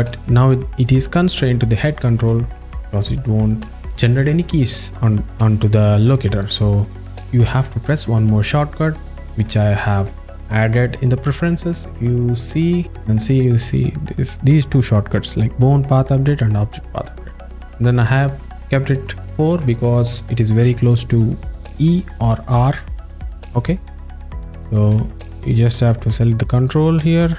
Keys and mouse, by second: 5.9 alt+middle click, 6.6-7.0 alt+shift+middle drag, 9.9-10.7 drag, 25.1-25.6 alt+middle drag, 26.2 click.